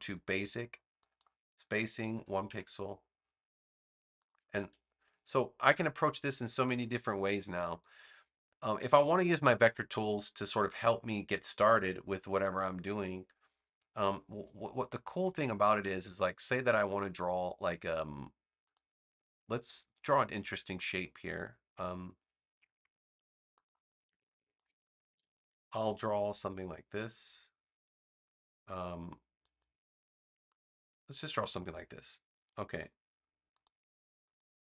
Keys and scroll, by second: 2.0 1, 2.4 Return, 25.0 a.